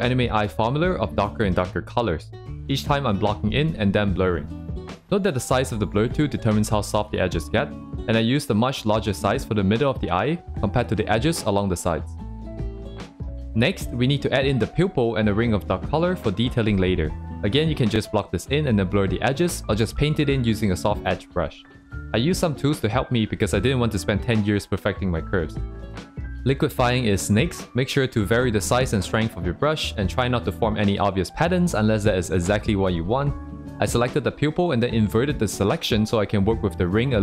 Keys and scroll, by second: 3.4 ctrl+z, 4.8 ctrl+z, 6.5 ctrl+z, 8.4 ctrl+z, 9.2 ctrl+z, 10.8 ctrl+z, 11.7 ctrl+z, 11.7 c, 17.9 ctrl+z, 22.8 ctrl+z, 25.8 ctrl+z, 27.4 ctrl+z, 30.8 ctrl+z, 33.3 ctrl+z, 36.2 ctrl+z.